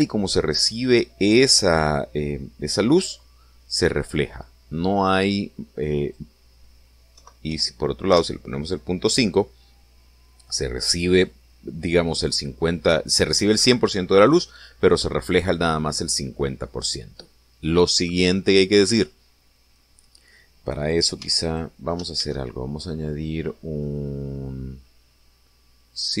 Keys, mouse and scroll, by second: 6.9 click, 8.1 ., 8.4 5, 9.0 Return, 22.2 x, 22.4 click, 23.1 shift+a.